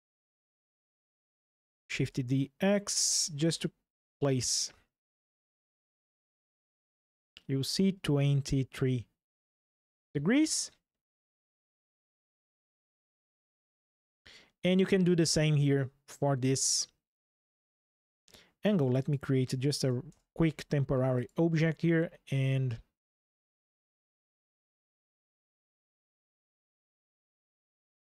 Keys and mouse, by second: 0.6 click, 1.6 shift+d, 1.9 x, 2.7-3.8 drag, 4.2 click, 5.6 ctrl+click, 12.0 click, 12.9 Delete, 18.7 click, 19.8 shift+d, 20.2 y, 20.9 click, 24.6 ctrl+click, 26.5 click.